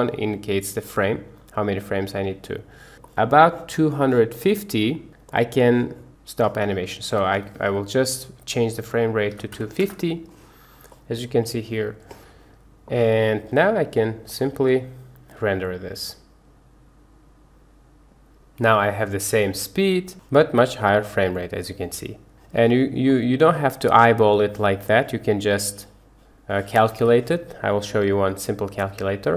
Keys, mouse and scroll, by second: 3.2 middle click, 4.2 click, 5.1 middle click, 7.3-9.8 drag, 11.0 middle click, 13.6 click, 14.5 space, 22.3 Escape, 23.3 click, 24.3 middle click, 25.6 click.